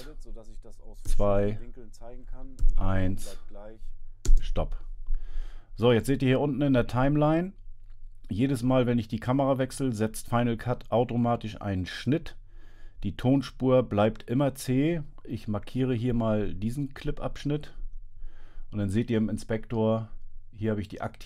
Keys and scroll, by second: 1.1 2, 2.7 i, 4.3 space.